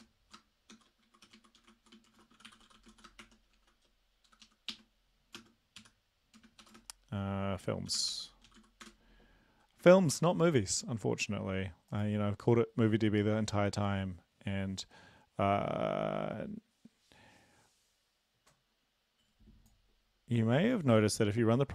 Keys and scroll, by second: 0.0-6.8 typing, 4.3 Left, 7.9-8.8 typing, 10.1 ctrl+l, 20.7 ctrl+c.